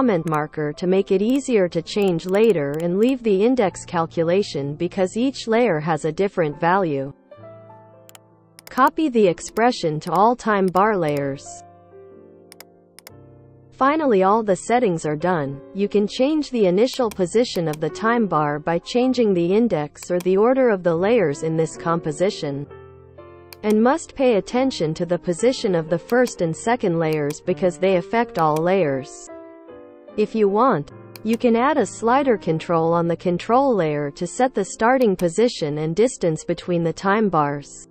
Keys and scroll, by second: 1.5 ctrl+v, 3.2-7.6 typing, 11.5 ctrl+v, 22.3 p.